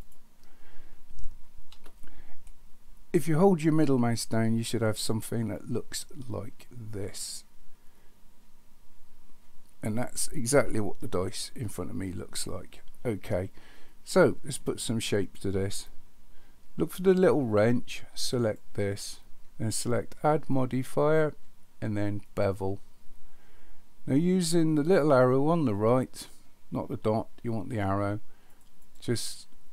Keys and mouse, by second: 1.8 n, 2.5-13.3 middle drag, 14.2-15.0 middle drag, 18.3 click, 20.6-22.4 drag, 28.5 click, 28.8 click, 29.1 click.